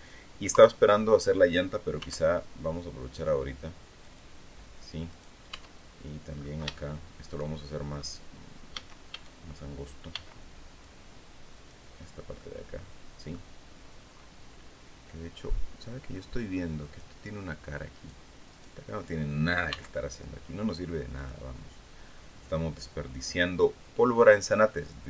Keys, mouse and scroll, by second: 0.0 KP_3, 1.5 s, 3.5 click, 4.6 right click, 5.0 Tab, 5.8 scroll down 2, 6.2 shift+middle click, 8.2 a, 9.6 b, 10.3-11.4 drag, 11.9-13.0 middle drag, 16.3 click, 17.4 right click, 18.0 right click, 19.2 x, 20.6 click, 23.7 click.